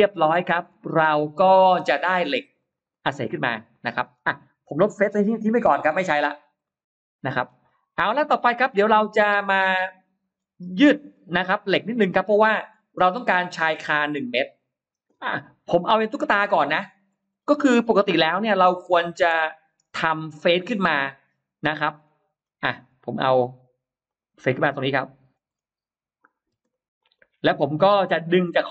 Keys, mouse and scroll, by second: 0.7 space, 0.9-1.2 scroll up 1, 1.1 middle click, 1.3-1.7 scroll down 1, 2.1 click, 2.7 click, 2.9 click, 3.5 middle click, 5.5 Delete, 6.1 scroll down 1, 6.5 middle click, 7.5-8.8 scroll up 6, 8.5 middle click, 8.8-9.5 scroll down 2, 9.5 middle click, 10.1-10.5 scroll down 1, 10.5-11.5 scroll up 3, 11.7-12.3 scroll down 2, 12.5 middle click, 13.4-14.2 scroll up 2, 15.4-15.7 scroll up 1, 16.7-17.5 scroll down 2, 18.1-19.1 middle drag, 19.7-20.1 scroll down 1, 20.2-21.4 middle drag, 22.3 scroll up 1, 23.0-23.3 scroll up 1, 23.3 r, 23.9 click, 24.2-24.5 scroll down 1, 25.1 scroll up 1, 26.1 click, 26.4 space, 26.5 click, 26.7 click, 27.3 scroll down 1, 27.6 middle click, 28.1 scroll down 1, 28.6 m.